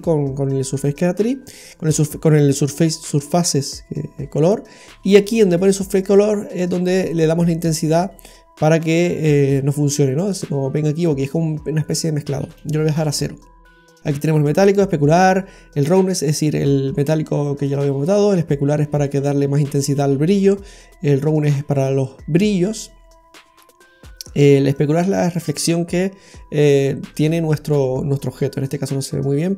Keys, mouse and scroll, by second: 1.2-1.5 scroll up 1, 1.5-2.5 scroll down 1, 2.5-2.8 scroll down 1, 5.4-5.7 scroll up 1, 5.7-6.0 scroll down 2, 6.6 click, 12.1 click, 13.1-13.4 scroll down 2, 13.9 middle click, 23.5-24.5 scroll down 1, 24.7 click.